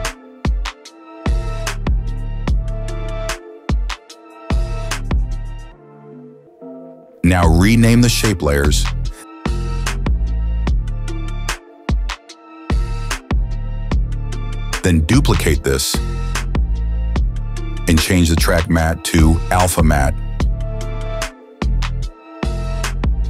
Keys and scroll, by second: 2.8 KP_0, 3.2 Return, 13.9 Return, 15.4 ctrl+d.